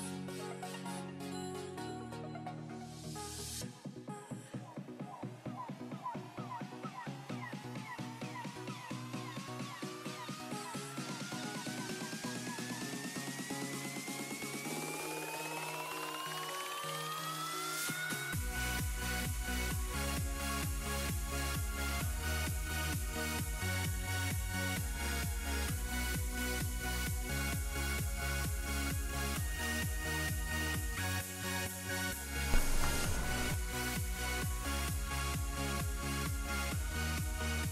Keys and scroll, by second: 2.9 s, 3.4 s, 7.2 s.